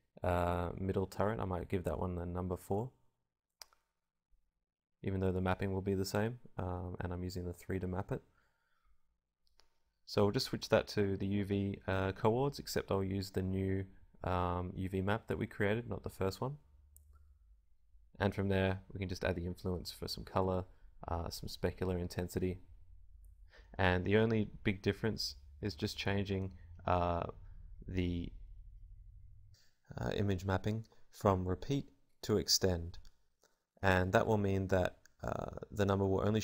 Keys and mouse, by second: 24.9-33.3 drag.